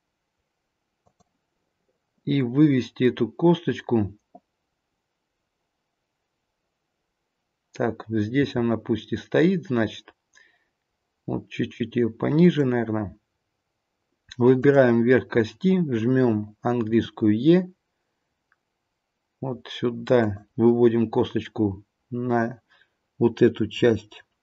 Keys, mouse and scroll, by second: 8.3 g, 14.5 click, 16.8 e, 23.8-24.4 scroll up 1.